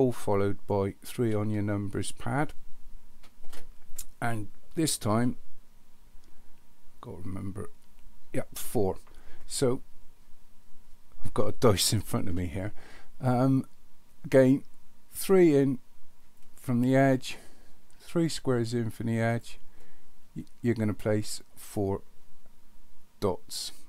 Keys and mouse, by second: 1.3 ctrl+KP_3, 16.4 click, 19.2 click, 21.6 click.